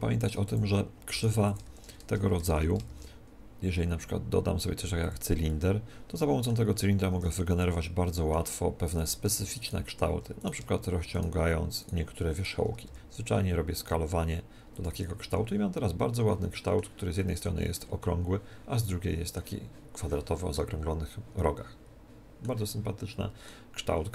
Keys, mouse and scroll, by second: 0.2-3.0 right drag, 0.4-2.2 drag, 1.2 x, 1.6 shift+a, 2.4 shift+c, 2.8 shift+a, 5.4-7.5 middle drag, 7.1 Tab, 7.5-9.0 drag, 9.0-14.2 right drag, 9.2 middle click, 12.8 s, 14.8 click, 15.0 Tab, 15.4-19.5 middle drag, 20.5-22.3 middle drag, 22.6-24.1 middle drag.